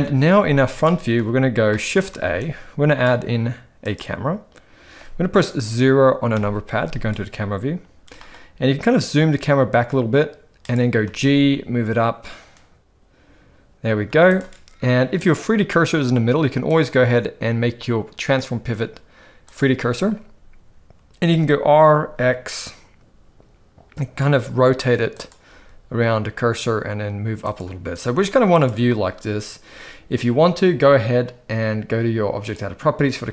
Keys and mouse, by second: 0.9-1.2 shift+middle drag, 1.7 shift+middle click, 2.2 shift+a, 6.3 KP_0, 8.1 g, 11.0 g, 16.8-19.5 drag, 21.2 r, 25.5 g, 28.0 r, 32.4 click.